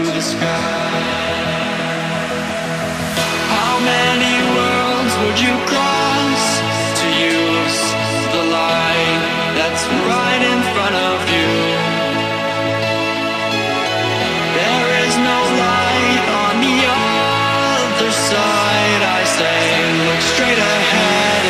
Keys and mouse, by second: 1.1-8.1 alt+drag, 9.8 click, 11.8-13.0 shift+drag, 15.3-16.7 shift+drag, 18.5 shift+Right, 19.7 shift+Up, 20.4 click, 20.8 shift+Left, 21.0 shift+Up.